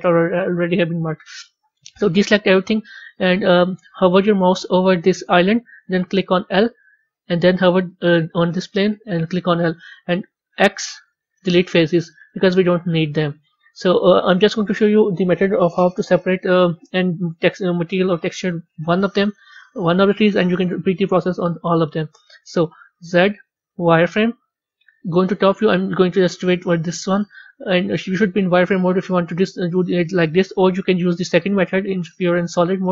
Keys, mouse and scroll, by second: 0.0-2.0 middle drag, 3.2-6.2 middle drag, 9.0 2, 9.7 middle click, 12.8-15.8 middle drag, 15.8 click, 25.1 KP_7, 27.9-30.9 middle drag, 32.1-32.9 middle drag.